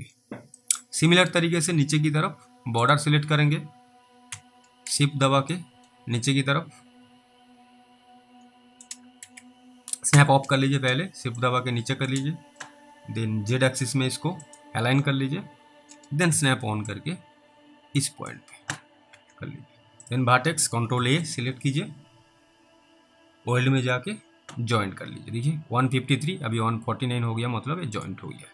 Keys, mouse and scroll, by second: 0.1-0.6 scroll down 3, 0.9 middle click, 1.4 middle click, 1.5 scroll up 1, 2.9 click, 4.3 w, 5.8 shift+click, 9.2 ctrl+z, 10.1 ctrl+s, 11.7 shift+click, 16.3 s, 17.2 click, 18.7 alt+w, 19.1 alt+w, 20.0 click, 21.0 ctrl+a, 23.9 click, 27.9 click.